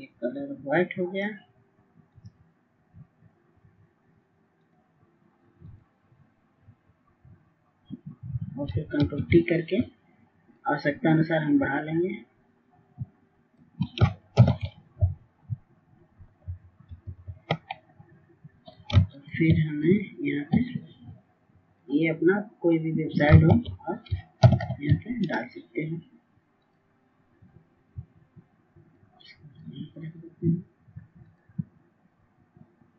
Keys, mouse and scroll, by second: 12.2 ctrl+t, 13.8 shift+click, 17.6 Return, 18.2 Down, 18.4 Down, 18.6 typing, 19.7 Down, 20.1-20.5 typing, 21.9 click, 22.4-25.9 ctrl+drag, 26.8 ctrl+x, 29.9 click.